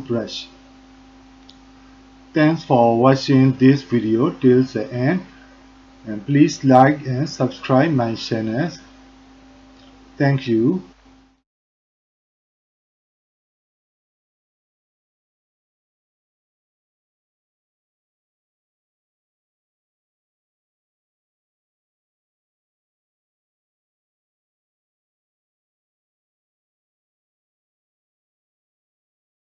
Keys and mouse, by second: 0.0 f, 0.8 shift+click, 1.2 shift+click, 1.8 click, 2.3 click, 3.1 f, 3.7 click, 4.2 alt+click, 4.7 alt+shift+click, 5.1 click, 5.7 alt+click, 6.3 ctrl+alt+click, 6.8 click, 7.7 click, 8.0 click, 8.4 click, 8.8 f, 9.0 click, 9.4 click, 9.9 click, 10.2 click, 10.5 shift+click, 10.9 ctrl+click, 11.1 alt+click, 11.3 ctrl+alt+click, 11.5 alt+shift+click, 12.6 ctrl+alt+click, 12.7 shift+click, 13.0 click, 13.2 ctrl+click, 13.4 alt+shift+click, 13.6 ctrl+click, 13.9 ctrl+alt+click, 14.5-16.6 drag, 17.3 alt+click, 17.6 alt+click, 17.7 alt+shift+click, 17.9 alt+click, 18.0 ctrl+click, 18.6 click, 19.3 alt+click, 19.5 click, 20.1 click, 20.4 click, 20.8 click, 21.1 shift+click, 22.0 alt+click, 22.2 click, 23.0 click, 23.4 alt+click, 23.6 ctrl+click, 23.7 alt+shift+click, 23.9 click, 24.0 ctrl+click, 24.2 alt+click, 24.4 ctrl+click, 24.9 alt+click, 25.1 ctrl+alt+click, 25.3 alt+shift+click, 25.4 alt+click, 25.6 ctrl+alt+click, 25.9 click, 26.9 alt+click, 27.1 ctrl+click, 27.3 click, 27.5 ctrl+click, 27.7 shift+click, 28.0 alt+click, 28.2 ctrl+alt+click, 28.4 alt+shift+click, 28.6 alt+click, 28.8 ctrl+alt+click, 29.0 alt+click, 29.3 ctrl+alt+click, 29.5 shift+click.